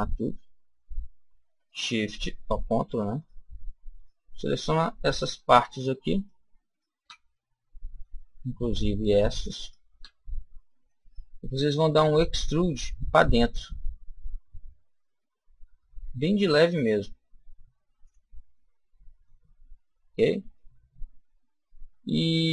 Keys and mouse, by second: 0.0-7.5 right drag, 7.3 middle click, 8.3 ctrl+middle click, 9.0-11.5 ctrl+right drag, 11.6 ctrl+e, 18.0 click, 18.4-19.7 middle drag, 20.5-22.3 middle drag.